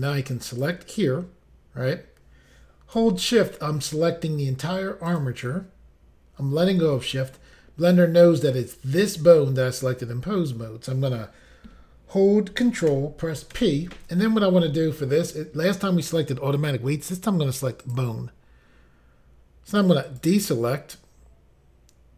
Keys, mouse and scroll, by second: 0.5 click, 0.6 click, 5.1 shift+click, 13.5 ctrl+p, 17.8 click, 18.0 click, 20.1 click, 20.2 click.